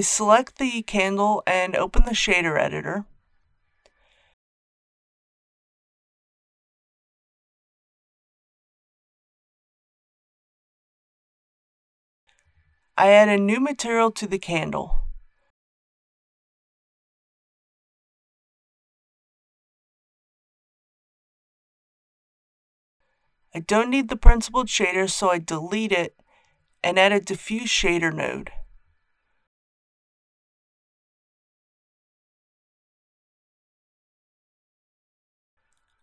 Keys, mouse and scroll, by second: 9.1 n, 9.5-10.3 scroll down 1, 10.4 shift+middle click, 10.9-11.2 scroll down 1, 11.6 click, 15.6-16.6 typing, 16.9 Return, 18.3 shift+middle click, 19.3 scroll up 1, 22.3 click, 24.3 Delete, 26.6 shift+a, 30.4-34.1 drag.